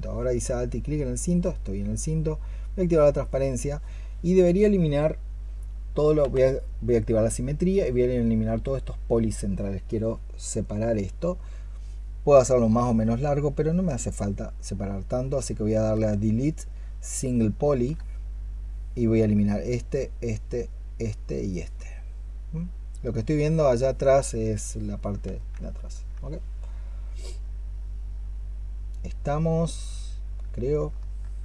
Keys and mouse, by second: 6.1 x, 15.3-17.7 space, 21.6 double click, 25.6 alt+click, 27.7 alt+click, 30.8 alt+click.